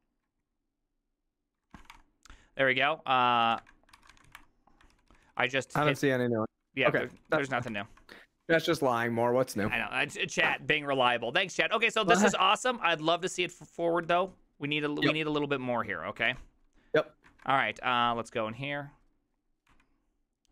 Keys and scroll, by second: 0.0-0.5 typing, 1.6-2.3 typing, 3.5-4.9 typing, 5.0 ctrl+u, 5.2 ctrl+u, 5.3 ctrl+u, 5.5 ctrl+u, 5.6 ctrl+u, 5.8 ctrl+u, 6.0 ctrl+d, 6.1 ctrl+d, 6.3 ctrl+d, 6.4 ctrl+d, 6.6 ctrl+d, 6.8 ctrl+d, 7.0 ctrl+d, 7.1 ctrl+u, 7.3 ctrl+u, 7.4 ctrl+u, 7.8 ctrl+d, 8.5-10.3 typing, 12.3 j, 12.8 j, 14.1 ctrl+u, 16.3 ctrl+c, 19.8 Up.